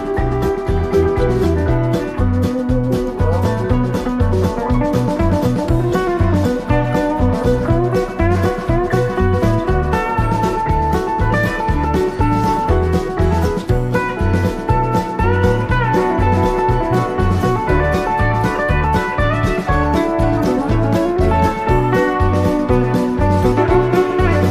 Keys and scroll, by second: 16.8 super+[, 18.3 super+-, 19.2 i, 20.4 super+=.